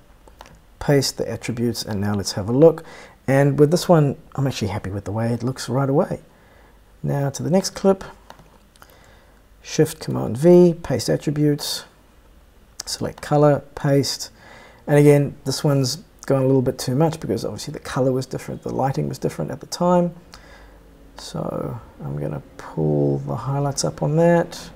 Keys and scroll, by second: 10.6 shift+super+v.